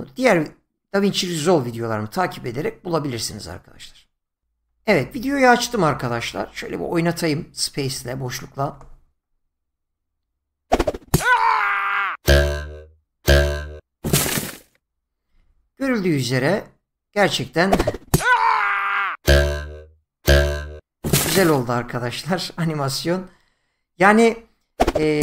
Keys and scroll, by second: 8.7 space.